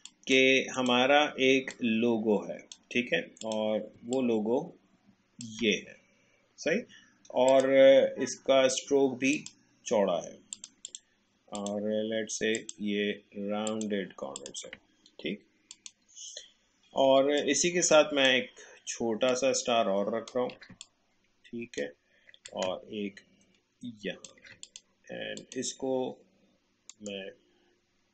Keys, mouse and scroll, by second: 4.4-17.0 shift+drag, 17.4 alt+click, 19.3-21.1 alt+shift+drag, 26.9 right click.